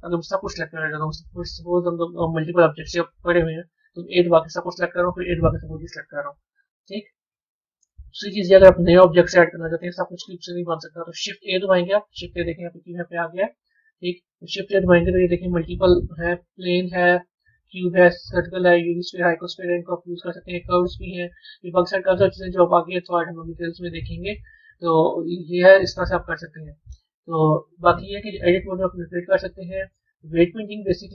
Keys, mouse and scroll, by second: 3.4 scroll down 5, 6.1 scroll up 1, 8.1-9.2 middle drag, 9.2-10.2 scroll down 1, 11.1 shift+a, 14.3 shift+a, 25.8-28.2 middle drag, 28.2-31.1 drag.